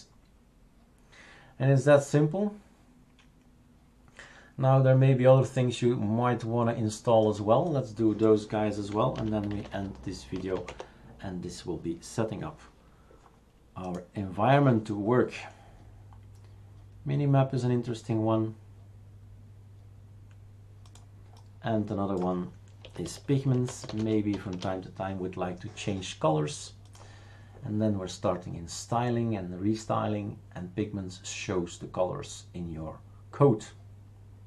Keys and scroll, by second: 8.9-11.1 typing, 22.5-24.8 typing.